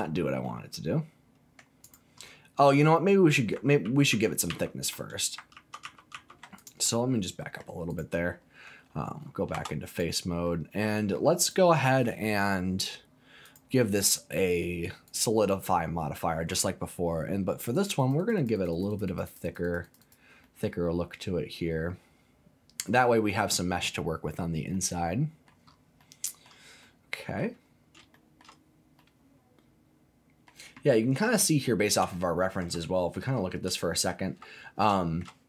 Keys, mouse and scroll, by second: 0.0-0.3 scroll down 2, 0.4-1.6 middle drag, 1.8 click, 2.2-3.4 middle drag, 3.8 ctrl+z, 4.1 ctrl+z, 4.5 ctrl+z, 5.5 ctrl+z, 5.8 ctrl+z, 6.1 ctrl+z, 6.6 click, 6.9 middle click, 7.9 click, 9.5 3, 9.9 click, 10.5 middle click, 11.4 click, 13.4-15.1 drag, 15.7 middle click, 17.7 click, 18.0 click, 18.1 click, 18.4 click, 18.5 click, 18.7 click, 18.9 click, 19.1 click, 19.2 click, 19.4 click, 19.6 click, 19.8 click, 20.0 click, 20.4-22.8 middle drag, 24.7 middle click, 25.7 scroll up 2, 26.0 middle click, 26.4 scroll down 1, 26.8 middle click, 27.4-27.9 scroll down 3, 28.1 shift+middle click, 28.4 shift+scroll down 1, 28.6-29.0 scroll up 2, 29.0-30.5 middle drag, 31.7-32.0 scroll up 4, 32.1 shift+middle click, 32.8 middle click, 33.3-33.6 scroll up 2, 33.8 shift+middle click, 34.1-34.9 shift+scroll down 3, 35.0 shift+middle click.